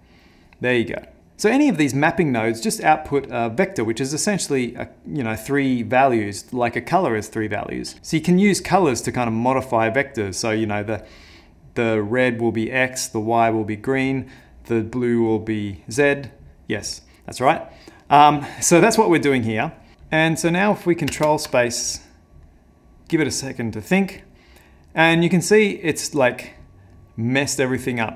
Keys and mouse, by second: 20.5 middle click, 21.3 ctrl+space, 25.3 middle click, 27.0 middle click, 27.6 middle click.